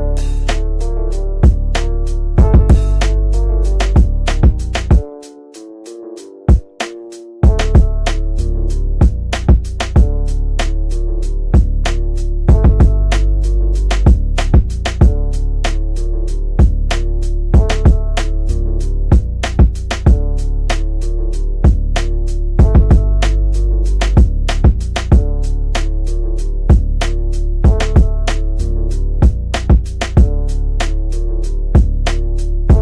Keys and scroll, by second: 0.9 Delete, 3.9 shift+Page_Up, 13.5 shift+F2, 13.8 Escape, 14.5 Caps_Lock, 15.1-17.5 typing, 17.0 Return, 17.9 Return, 19.9-23.0 typing, 23.7 Return, 24.3-25.4 typing, 25.6 Return, 26.9-27.8 typing, 28.9 9.